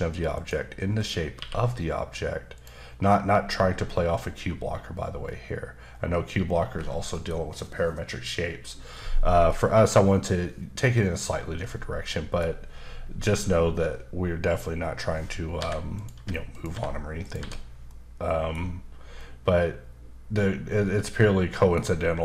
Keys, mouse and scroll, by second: 0.3 right click, 1.3 q, 2.5 click, 5.2 middle click, 9.5 middle click, 11.6 middle click, 15.6 h, 15.9 click, 16.1 h, 16.5 click, 16.7 h, 17.2 click, 17.4 h, 17.8 middle click, 19.2 middle click.